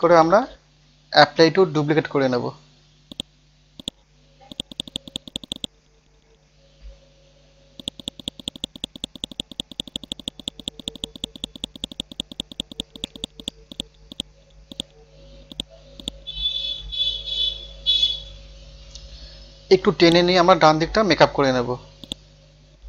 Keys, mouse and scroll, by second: 0.9 ctrl+z, 1.2 ctrl+z, 1.4 ctrl+z, 3.1 click, 6.0 scroll down 1, 6.7 scroll up 1, 7.8 click, 18.6 scroll up 1, 20.0 click, 21.3 scroll down 1, 22.0 right click.